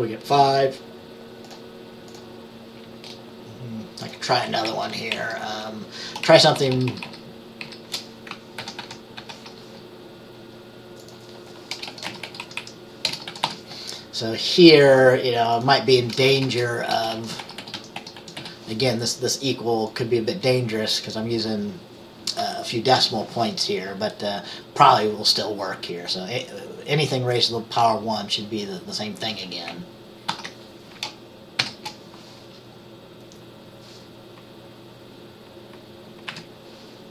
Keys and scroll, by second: 4.8 Left, 5.2 Right, 6.4 shift+Down, 6.5 shift+Down, 6.7 shift+Down, 6.8 shift+Down, 8.7 ctrl+c, 8.9 ctrl+v, 9.3 ctrl+v, 11.8-14.0 typing, 16.4-19.0 typing, 30.4 ctrl+s, 31.7 ctrl+b, 36.4 F5.